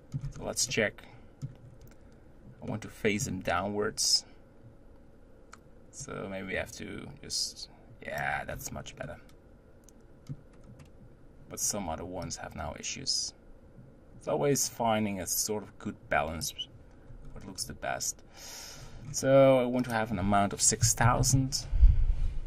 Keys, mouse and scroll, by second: 0.3-0.7 scroll up 3, 0.7-1.7 middle drag, 1.7-2.4 scroll up 3, 2.8-5.7 middle drag, 6.0-8.5 drag, 8.5-9.0 scroll down 6, 9.0-10.8 middle drag, 10.8-11.3 scroll down 2, 12.2-15.4 drag, 17.2-18.4 scroll down 2, 18.7-19.8 scroll up 3, 19.8-21.2 drag, 21.2 0, 21.3 0.